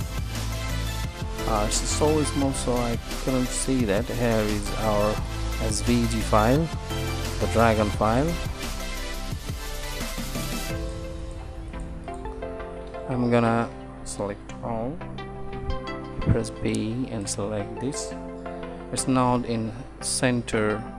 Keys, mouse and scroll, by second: 12.8 a, 13.0 a, 16.0 a, 16.2 b.